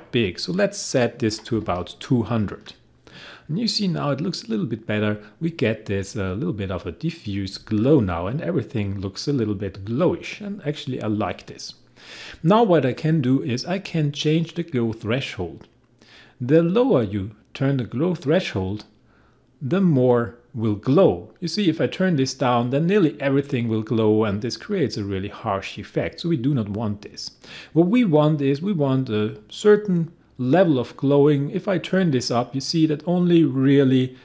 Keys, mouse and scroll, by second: 1.0-2.1 typing, 16.8-34.2 drag.